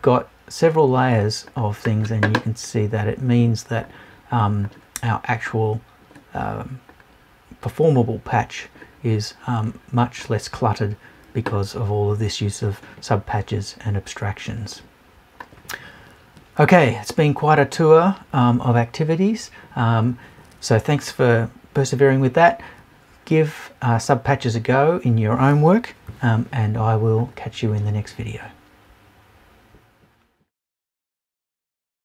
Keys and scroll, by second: 26.1 Left.